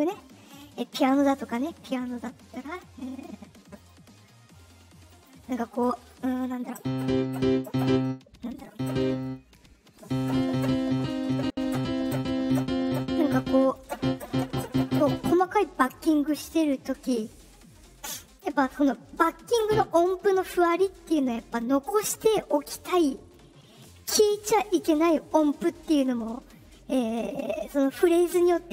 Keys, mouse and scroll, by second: 3.0 click, 3.7 click, 5.0 click.